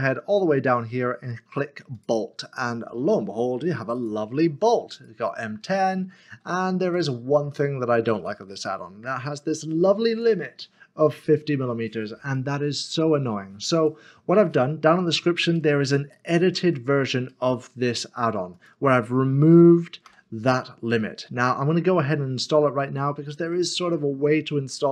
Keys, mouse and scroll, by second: 1.9 a, 2.0 click, 6.3 scroll down 1, 6.9 middle click, 7.6 shift+middle click, 9.1 click, 12.3 click, 13.7 middle click, 16.6 shift+middle click, 17.3 shift+middle click, 20.1 Delete, 22.6 middle click, 23.5 shift+middle click.